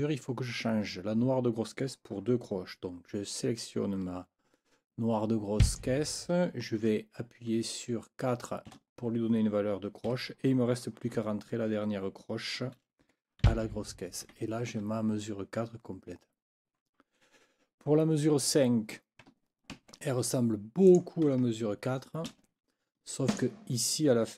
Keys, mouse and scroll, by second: 5.6 click, 8.6 4, 10.1 Right, 11.2 n, 13.0 KP_4, 13.4 b, 14.2 Escape, 18.4 click, 19.7 ctrl+c, 20.9 click, 22.3 ctrl+v, 23.3 click.